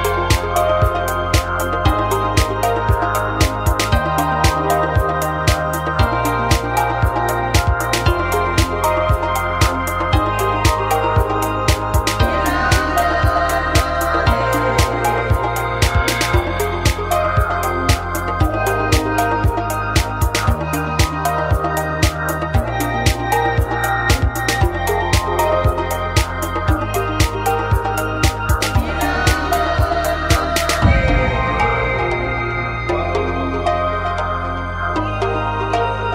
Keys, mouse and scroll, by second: 6.2 n, 6.9 click, 8.1 n, 8.4 a, 9.7 KP_1, 11.5 e, 23.3-28.7 middle drag, 30.5 a, 31.6 z, 32.5 z, 33.0 ctrl+r, 35.2 middle click, 35.5 z, 36.0 ctrl+r.